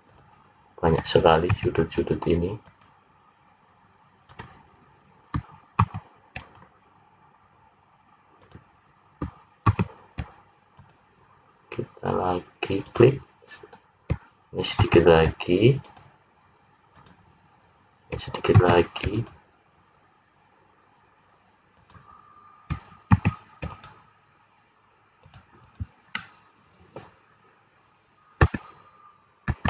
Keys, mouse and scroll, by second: 1.6 ctrl+r, 5.8 ctrl+r, 9.7 ctrl+r, 14.8 ctrl+r, 18.6 ctrl+r, 23.1 ctrl+r, 25.6 click, 26.1 middle click, 27.4-28.1 scroll down 2, 28.4 `, 29.4 `.